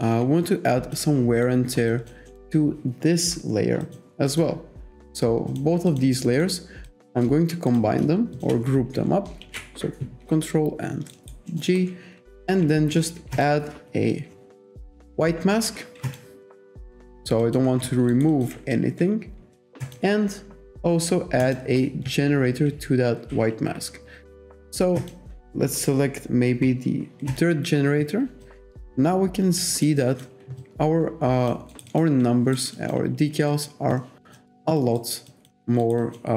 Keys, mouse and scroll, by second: 1.5 alt+right click, 2.3 alt+middle click, 3.9 click, 4.3 click, 5.5 click, 5.9 click, 6.4 click, 6.9 click, 7.7 click, 8.4 shift+click, 9.5 ctrl+g, 11.2 alt+right click, 11.5 alt+middle click, 11.7 alt+right click, 13.4 click, 16.1 click, 17.1 alt+right click, 18.2 alt+right click, 18.4 alt+click, 19.9 click, 21.5 click, 25.0 click, 27.3 click, 28.5 alt+click, 29.8 alt+right click, 30.1 alt+click, 30.6 alt+click, 31.8 alt+right click, 31.9 alt+click, 32.6 alt+right click, 32.8 alt+click, 33.6 alt+click, 34.1 alt+click, 34.6 alt+click, 35.0 alt+right click, 35.9 alt+right click, 36.1 alt+click.